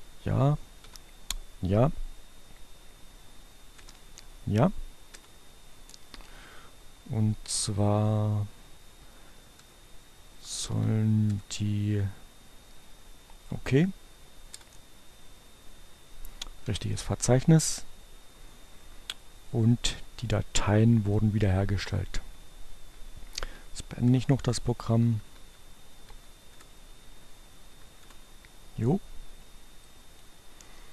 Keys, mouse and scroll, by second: 0.0 Return, 2.6 Return, 4.9 Return, 5.6 Down, 7.8 Return, 10.2 Down, 10.9 Return, 12.8 Return, 15.6 y, 21.0 click, 22.9 Down, 23.4 Return, 24.7 Right, 26.1 Left, 26.4 Return, 27.2 Right, 27.9 Return, 29.7-30.9 drag.